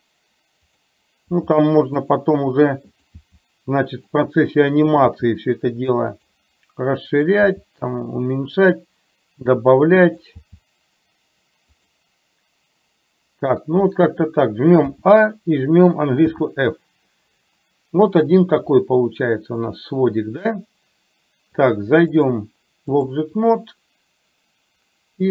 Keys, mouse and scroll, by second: 4.1 g, 4.8 click, 5.2 g, 7.3 click, 10.1 click, 10.3 g, 16.3 f, 22.2-23.2 drag.